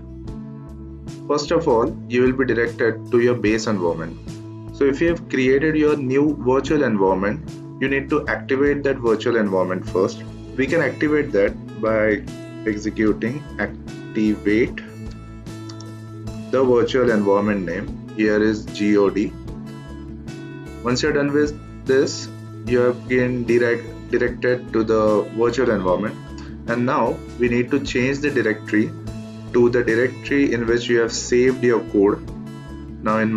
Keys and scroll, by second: 11.6-17.6 typing, 19.4 Return.